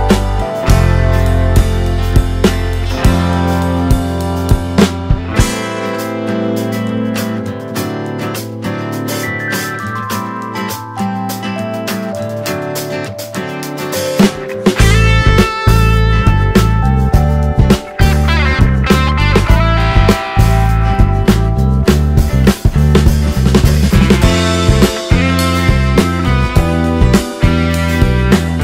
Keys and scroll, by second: 4.0 space, 19.6 m, 21.3 d, 27.1 ctrl+t.